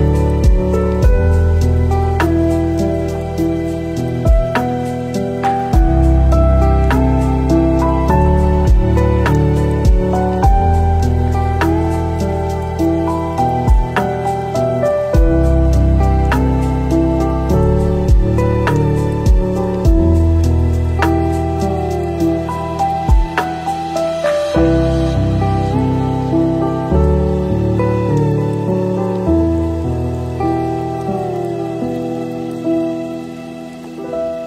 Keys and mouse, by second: 0.4 alt+z, 1.6 click, 3.2 p, 4.3 Tab, 7.6 middle click, 7.9-8.4 middle drag, 8.4 click, 9.0 g, 10.7 click, 11.0 middle click, 12.0 middle click, 12.7 click, 13.5 s, 16.0 middle click, 17.1 shift+middle click, 17.8 click, 18.4 g, 19.4 drag, 20.0 g, 20.9 click, 21.2-22.4 middle drag, 23.3 shift+s, 24.1 click, 25.0 shift+middle drag, 26.4-26.7 drag, 28.0-28.9 middle drag, 29.5 click, 30.9 middle click, 31.7 click, 32.3-34.1 drag.